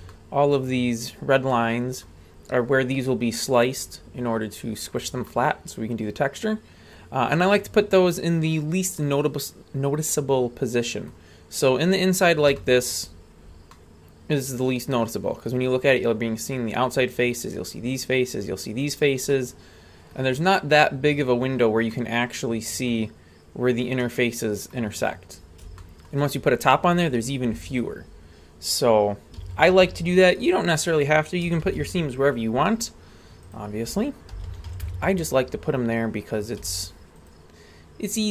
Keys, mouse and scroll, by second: 0.1-0.6 middle drag, 1.5-2.0 middle drag, 5.3-7.0 middle drag, 7.3-11.1 middle drag, 12.0 scroll down 2, 12.5-12.9 shift+middle drag, 13.7-15.5 middle drag, 19.3 middle click, 21.9 middle click, 24.0 middle click, 25.8 shift+middle click, 27.6-29.4 scroll down 2, 29.4 a, 29.8 a, 31.6 shift+a, 34.3 s, 35.5-36.2 scroll down 1, 36.2-36.6 scroll up 1, 36.6 z, 38.2 right click.